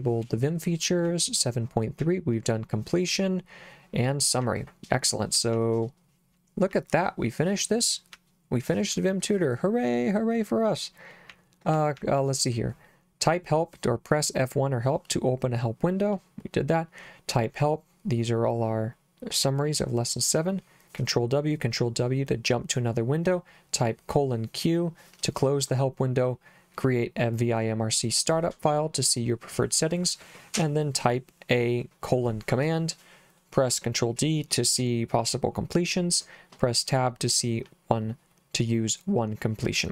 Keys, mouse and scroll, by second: 0.2 j, 2.0 j, 4.4 k, 5.5 k, 6.7 k, 8.2 j, 11.3 k, 12.0 j.